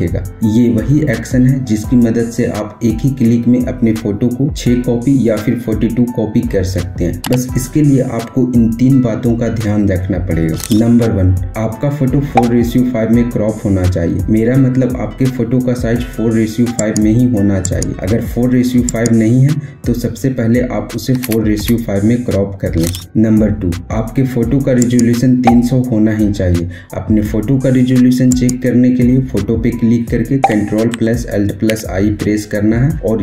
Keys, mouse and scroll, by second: 16.5 click, 20.6 Return, 24.5 click, 28.1 click, 31.5 ctrl+alt+i.